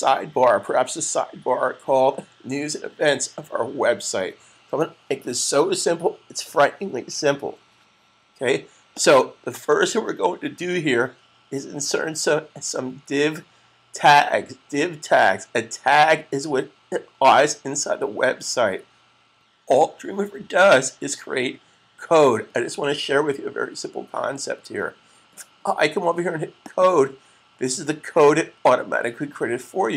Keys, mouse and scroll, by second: 8.8 click, 26.5 click.